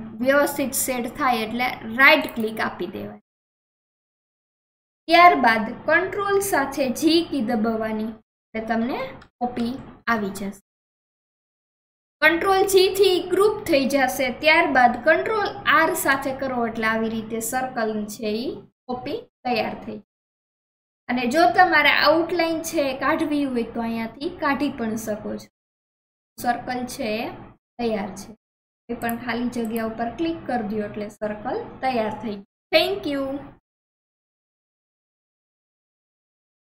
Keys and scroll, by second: 7.6 ctrl+r, 36.3 ctrl+r.